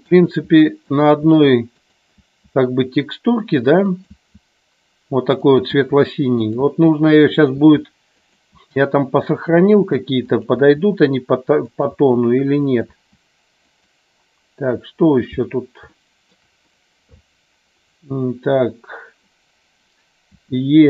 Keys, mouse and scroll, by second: 0.3 e, 0.9 click, 1.2 e, 2.3 e, 4.0 click, 4.1 e, 5.4 click, 5.8-10.6 typing, 7.4 click, 8.2 click, 9.3 click, 10.3 click, 11.7 click, 12.1 e, 12.7 click, 13.1 e, 13.7 click, 16.1 shift+middle click, 20.4 e.